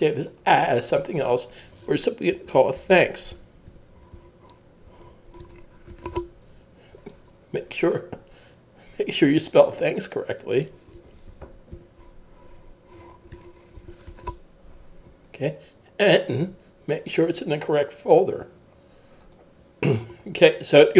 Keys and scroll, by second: 2.3-4.6 typing, 5.9-6.6 typing, 8.1 typing, 10.7-12.2 typing, 13.8 typing, 16.0 k.